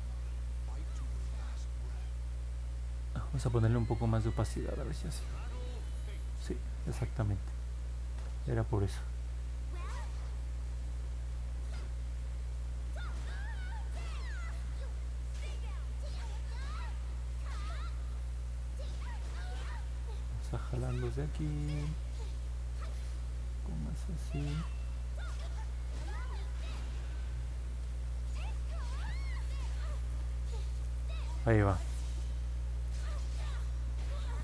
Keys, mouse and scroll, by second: 5.7 click, 6.1 click, 6.5 click, 6.8 click, 7.1 click, 7.4 click, 7.7 click, 7.9 click, 8.2 click, 8.5 click, 8.8 click, 9.0 click, 9.3 click, 9.6 click, 9.8 click, 10.1 click, 10.3 click, 10.6 click, 10.8 click, 11.1 click, 11.4 click, 11.6 click, 11.9 click, 12.2 click, 12.7 click, 13.0 click, 13.4 click, 14.3 click, 14.7 click, 15.4 click, 15.9 click, 17.2 click, 19.1 click, 19.6 click, 19.8 click, 20.1 click, 20.4 click, 20.6 click, 20.9 click, 21.3 click, 21.5 click, 21.8 click, 22.1 click, 22.4 click, 22.9 click, 23.5 click, 24.0 click, 24.3 click, 24.6 click, 25.1 click, 25.4 click, 25.6 click, 25.9 click, 26.1 click, 26.4 click, 26.7 click, 26.9 click, 27.2 click, 27.5 click, 29.5 middle click, 29.5 scroll down 1, 30.9 middle click, 32.4 scroll down 2, 33.5 alt+middle click.